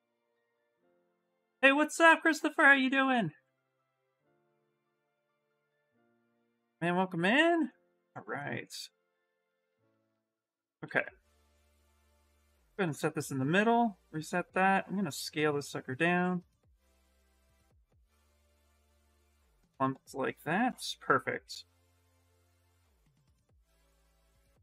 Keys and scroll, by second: 10.6 shift+f, 11.3 w, 18.3 q, 21.9 shift+f, 23.6 s.